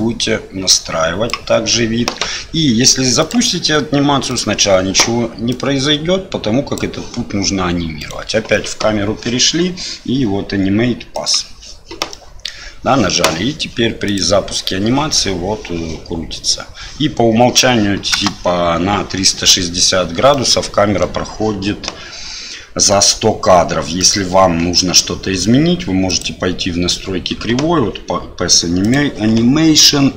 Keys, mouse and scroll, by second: 3.2 click, 4.3 click, 5.5-6.8 drag, 8.0 right click, 11.2 click, 12.2 middle click, 18.1 space, 20.4-21.2 middle drag, 24.0 right click, 28.9 click.